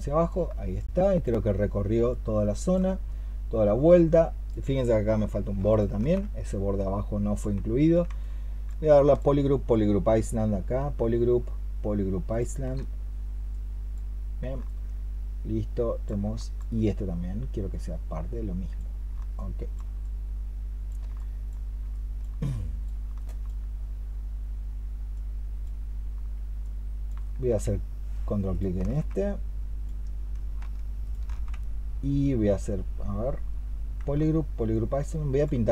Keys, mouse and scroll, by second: 0.7 alt+click, 5.5 ctrl+shift+click, 8.1 alt+click, 8.8 alt+click, 10.6-12.5 space, 14.5 alt+click, 16.2 alt+click, 19.2 alt+click, 21.0 alt+click, 21.8 alt+click, 23.0 alt+click, 27.5 alt+click, 30.9 ctrl+shift+click, 34.6 alt+click.